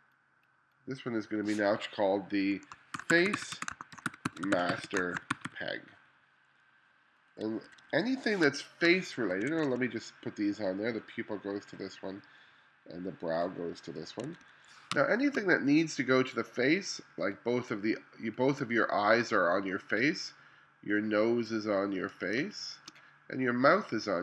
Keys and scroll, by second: 2.7-6.0 typing, 7.7 1, 8.5 space, 9.3 2, 14.3 1, 15.0 space, 22.5 space.